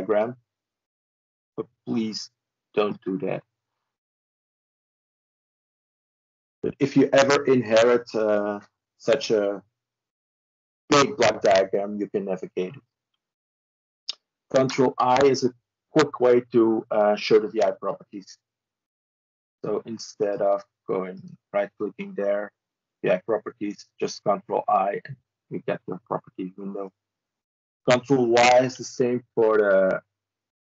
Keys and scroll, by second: 14.4 ctrl+i, 28.2 ctrl+y.